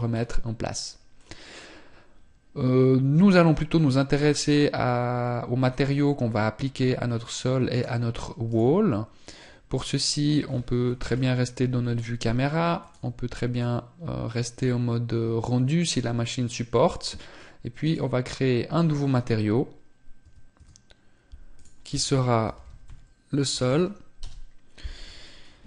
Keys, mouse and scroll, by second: 2.4-3.1 scroll up 10, 3.5-4.0 scroll down 2, 4.0 right click, 10.9 KP_0.